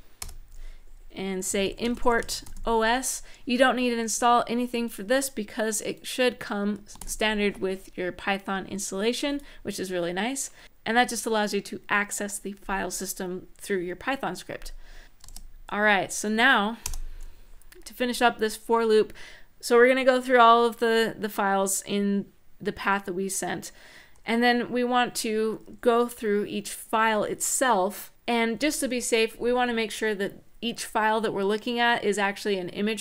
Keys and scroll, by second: 1.0-2.3 typing, 6.8 super+s, 15.0 shift+;, 16.6 Return.